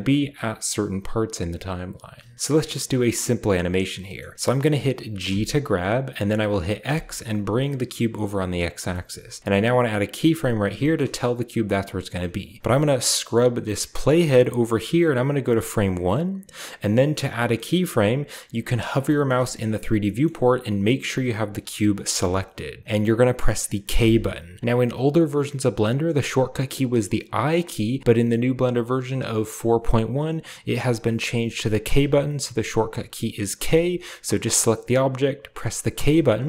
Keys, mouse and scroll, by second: 0.1-2.0 right drag, 1.0-2.3 drag, 2.3-3.9 middle drag, 2.3-3.9 scroll up 1, 4.1-5.1 middle drag, 5.1 g, 6.7 x, 8.5-10.6 shift+drag, 8.8-10.6 shift+middle drag, 9.1-10.6 shift+scroll down 1, 10.9-12.6 shift+middle drag, 10.9-12.6 shift+scroll up 1, 13.3-16.9 drag, 18.9-21.5 shift+middle drag, 21.5 a, 22.1 click, 23.8 k, 24.6-26.0 middle drag, 31.6 k, 33.4 k, 35.7 k.